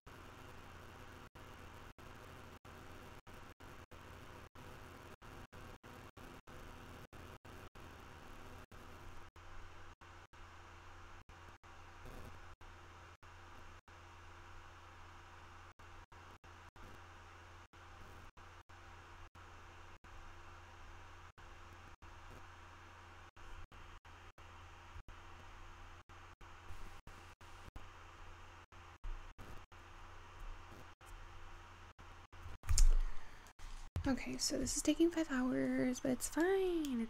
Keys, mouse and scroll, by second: 34.4-35.4 scroll down 2.